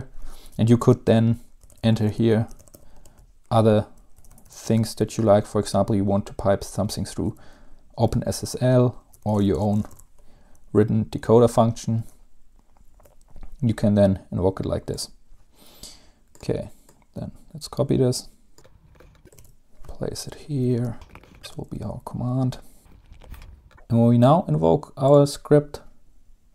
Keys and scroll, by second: 1.5-3.3 typing, 4.4-5.4 typing, 8.2-10.5 typing, 12.1-13.3 typing, 19.0 ctrl+c, 19.5 ctrl+v, 20.5 Home, 20.9-22.9 typing, 22.7 Down, 22.9 Down, 22.9 Return, 23.3 ctrl+s.